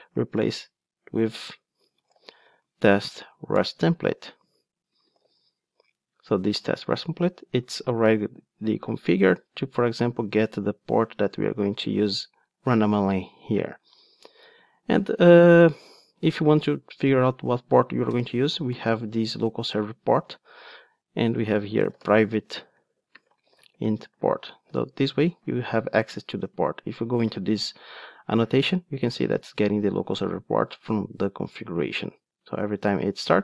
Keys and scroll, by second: 3.6 Return, 8.0 super+b, 10.9 ctrl+Tab, 19.7 Return, 25.3 alt+super+l, 27.2 super+b.